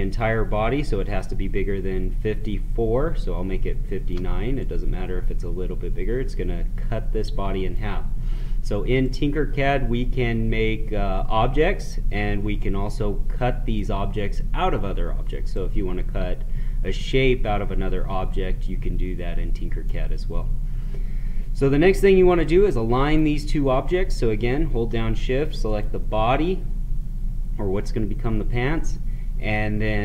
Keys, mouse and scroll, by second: 9.0-12.5 right drag, 12.5-15.5 drag, 15.5-22.0 right drag, 23.1 click, 25.6 shift+click.